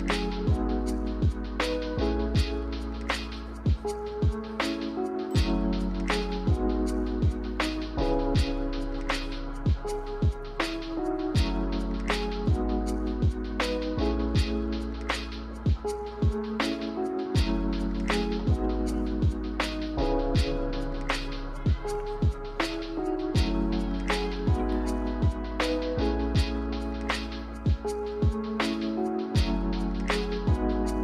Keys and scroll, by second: 2.0 a, 15.5 g, 22.9 a, 29.4 a.